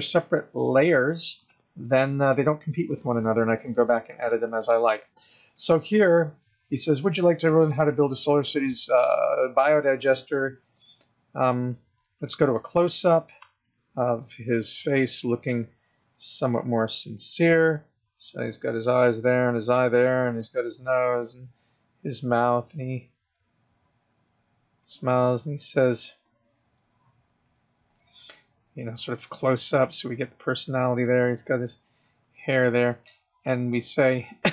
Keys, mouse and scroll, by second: 12.7 click, 13.3 click, 15.8 click, 17.2 click, 18.2 click, 19.1 click, 20.0 click, 21.2 click, 23.0 click, 24.0 click, 25.0 click, 25.6 click, 26.2 click, 26.5 click, 27.2 click, 28.1 click, 29.1 click, 30.2 click, 30.7 click.